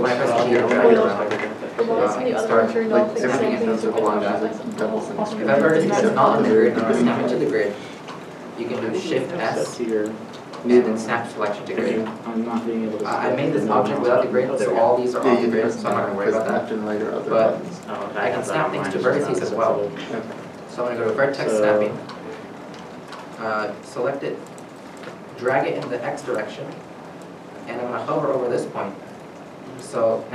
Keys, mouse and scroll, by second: 1.6 scroll up 1, 2.0 g, 4.8 right click, 9.2 right click, 9.5 shift+s, 16.7 ctrl+z, 17.0 scroll down 1, 17.8-18.6 scroll down 1, 22.2 middle click, 25.5 middle click, 25.6 g, 26.5 x.